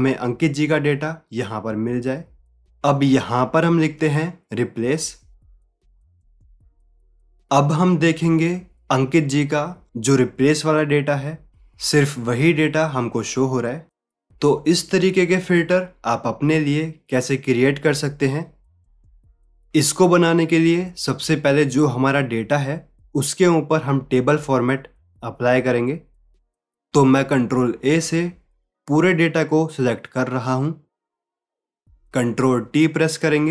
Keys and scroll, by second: 28.5 ctrl+a.